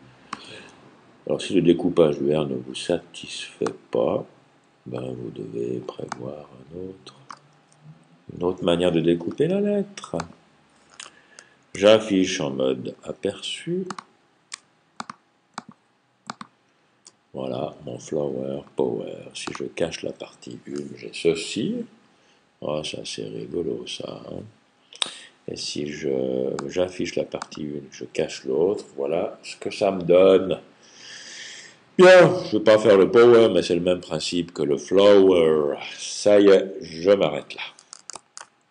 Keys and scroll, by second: 0.4 super+j, 7.4 super+j, 11.6 super+y, 14.4 super+y.